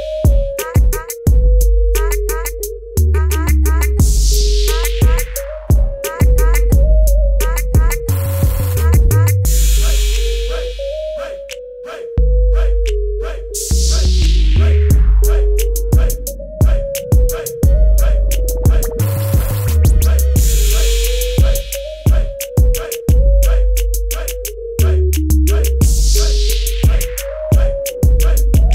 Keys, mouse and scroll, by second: 2.8 b, 3.2 right click, 4.9 click, 7.2 Return, 8.5-9.9 typing, 9.1 ctrl+=, 9.2 click, 9.8 click, 11.1 click, 16.7 click, 18.0 click, 22.0 KP_0, 22.3 click, 23.4 ctrl+alt+e, 25.1 click, 27.8 click.